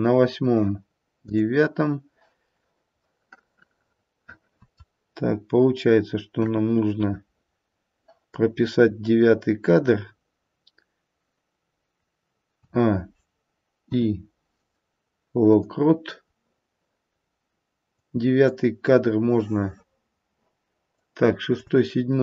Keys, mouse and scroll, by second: 3.0 middle click, 4.6 middle click, 6.3 KP_1, 12.5 a, 13.7 i, 17.9 click, 21.0 click.